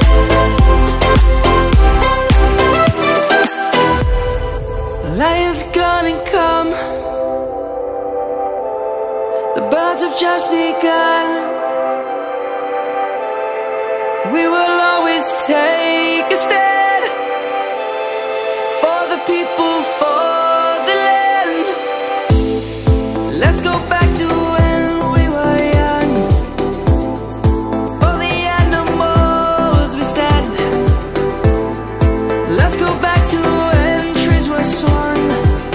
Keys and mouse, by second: 3.7 click, 5.5 Tab, 5.9 click, 6.3 Tab, 7.0 click, 9.0 click, 10.5 i, 13.0 right click, 13.8 click, 14.3 Tab, 14.6 click, 16.1 shift+click, 16.9 shift+click, 17.4 Tab, 18.1 click, 19.0 shift+click, 19.5 shift+click, 20.9 i, 23.0 click, 23.3 middle click, 24.1 middle click, 25.7 3, 27.3 shift+middle click, 29.2 shift+middle click, 30.4 middle click, 32.2 e.